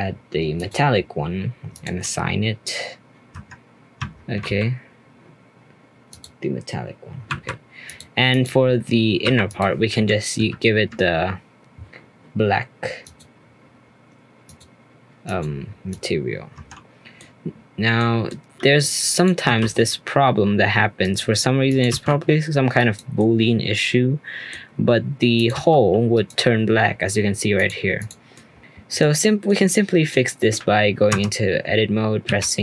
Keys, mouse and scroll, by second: 1.7-3.3 drag, 3.3 Tab, 4.0 Tab, 6.1-7.9 drag, 8.3 click, 9.2 3, 9.4 click, 10.4 ctrl+KP_Add, 13.0-16.5 drag, 16.5 Tab, 17.1-19.1 middle drag, 19.1 click, 19.4 g, 21.6 click, 22.0 g, 23.1-25.3 middle drag, 25.3 click, 27.5 click, 28.0 click, 28.3-29.3 middle drag, 29.3 scroll down 2, 29.4-31.1 middle drag, 31.1 Tab, 32.2 a.